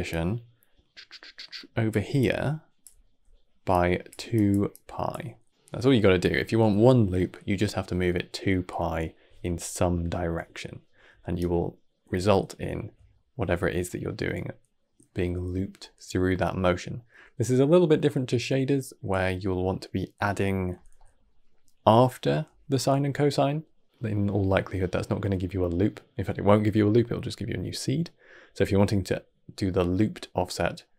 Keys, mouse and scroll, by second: 0.0-1.8 drag, 1.8-5.0 typing, 2.1 click, 3.6 click, 4.2 click, 9.3 d, 9.5-11.2 right drag, 11.2 d, 11.3 d, 11.4 d, 13.0-16.2 shift+middle drag, 20.8-24.8 middle drag, 28.3-30.9 middle drag.